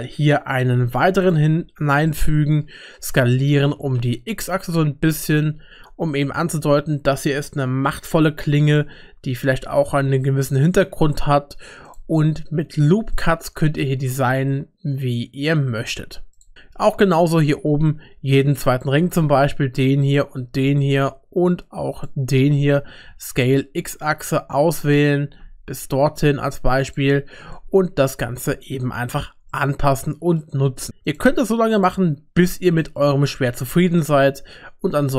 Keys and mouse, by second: 2.1 middle click, 3.1 middle click, 3.8 s, 10.0 ctrl+r, 12.6 2, 13.9 s, 16.5 middle click, 17.2 middle click, 18.7 alt+click, 20.0 alt+shift+click, 22.0 alt+shift+click, 23.1 s, 29.5 middle click, 30.8 middle click, 30.9 3, 31.1 click, 32.6 middle click, 33.2 g.